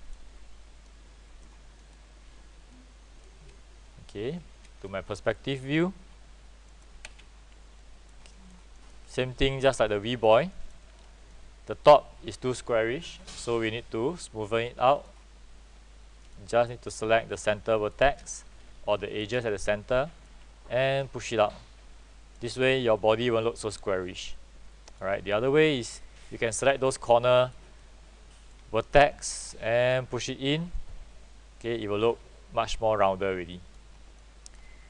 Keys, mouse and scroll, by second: 0.0 click, 5.8 typing, 6.9 middle click, 7.9 alt+click, 8.4 alt+click, 8.9 alt+middle click, 9.2 alt+click, 10.7 alt+middle click, 11.1 scroll up 1, 11.9-13.1 alt+drag, 13.4-15.2 alt+drag, 16.3 click, 17.4 shift+click, 19.1 ctrl+shift+click, 19.6 alt+click, 21.4 click, 23.0-25.1 alt+drag, 25.4 alt+click, 26.3 alt+click, 27.1 click, 27.9 alt+click, 29.2 alt+click, 30.0 click, 31.1-33.8 alt+drag, 34.3 alt+click.